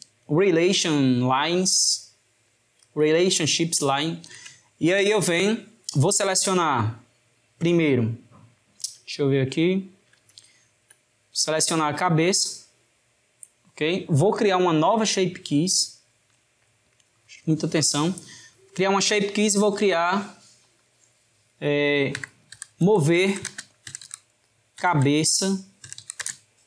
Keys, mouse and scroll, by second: 2.6-8.2 shift+middle drag, 9.5-11.5 shift+middle drag, 11.5 click, 14.4-19.2 middle drag, 19.2-20.7 drag, 20.8-23.9 drag.